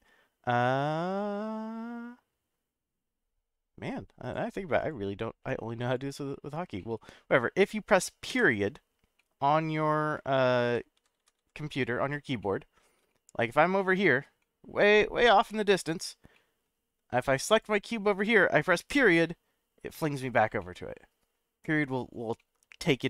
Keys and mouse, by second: 4.9-5.9 drag, 6.8 middle click, 8.3 /, 9.2-9.6 middle drag, 10.7-12.1 ctrl+z, 12.4-12.8 middle drag, 13.1 shift+middle click, 13.8-14.2 shift+middle drag, 14.4-15.3 middle drag, 15.5-15.9 shift+middle drag, 16.3-16.6 middle drag, 17.5 click, 18.9 /, 20.6-21.3 middle drag, 22.4-22.8 middle drag.